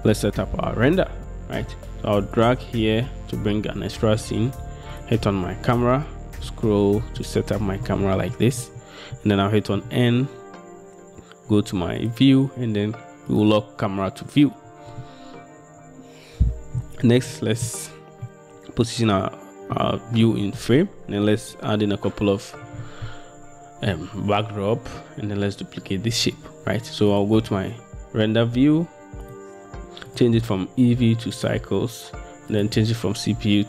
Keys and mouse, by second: 2.5-3.5 middle drag, 12.1 click, 13.4 click, 29.4 middle click, 30.3-31.8 middle drag, 32.7-33.6 middle drag.